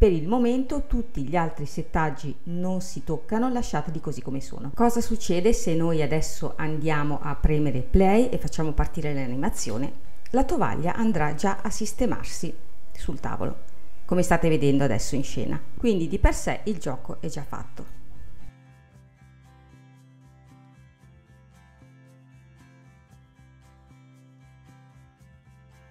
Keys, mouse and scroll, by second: 0.3-1.9 scroll down 3, 1.9-3.6 scroll down 2, 3.6-4.2 scroll down 3, 9.7 space, 11.2-12.0 scroll up 1, 12.0-13.0 middle drag, 13.0-13.7 scroll up 3, 13.7-15.7 middle drag, 16.6-18.8 drag, 18.8 space, 24.5-25.9 drag.